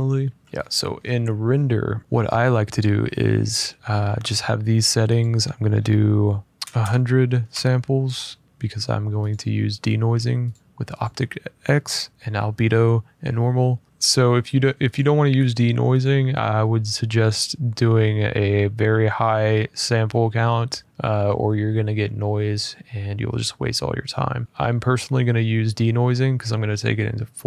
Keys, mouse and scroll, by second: 0.4 click, 0.4-1.6 scroll, 1.6 middle click, 4.9 click, 6.3 1, 6.5 0, 6.5 0, 7.2 Return, 9.0 click, 10.2 click, 10.7 click, 14.7 click, 15.7 click, 20.7-22.2 drag, 23.3-27.4 drag.